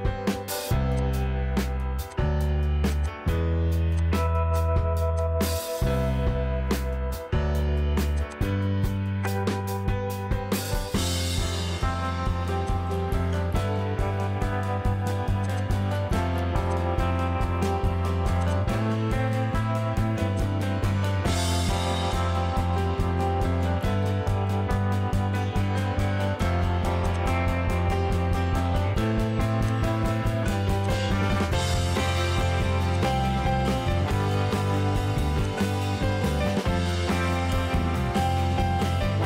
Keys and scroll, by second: 2.0 p, 3.6 e, 6.2 Escape, 8.6 p, 13.0 Escape, 16.0 p, 17.9 space, 19.0 m, 24.8 p, 26.6 m, 32.2 p, 35.8 Escape.